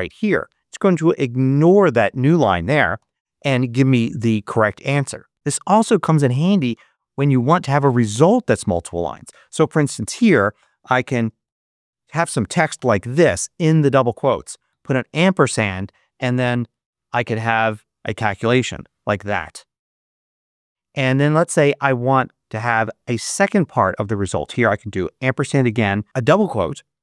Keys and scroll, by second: 2.9 Return, 8.7 BackSpace, 10.0 shift+', 10.8 shift+a, 11.0 shift+space, 11.3 =, 12.4 shift+space, 13.6 shift+', 14.6 shift+7, 16.4 shift+9, 18.5 shift+=, 20.1 shift+0, 24.8 shift+7.